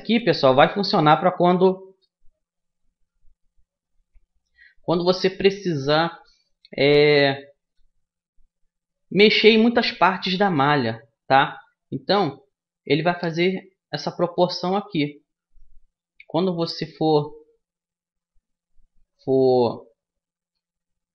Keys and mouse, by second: 5.7-9.1 middle drag, 11.1 a, 12.9 o, 14.4-18.3 middle drag, 20.1 e.